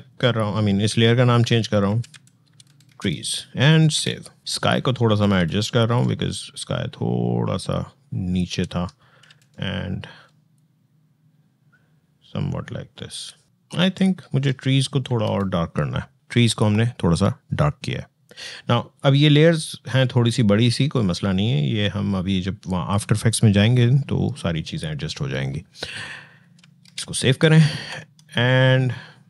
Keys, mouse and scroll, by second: 1.7 alt+t, 2.7 alt+s, 2.8 alt+Return, 3.7 ctrl+alt+s, 4.4 click, 5.1 v, 5.8-9.0 drag, 9.0 ctrl+t, 10.3-14.8 shift+drag, 14.8 ctrl+l, 16.1 click, 18.7-25.1 drag, 26.4 click, 26.6 ctrl+s, 27.8 alt+Tab.